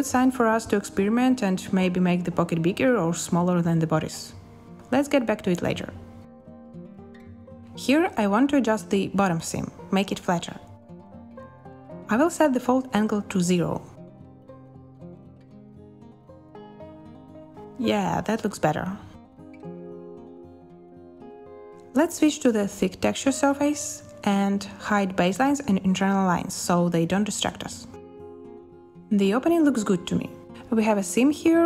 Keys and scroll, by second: 1.5 space, 7.0 space, 10.7 b, 15.4 space, 18.0 space, 19.4 a.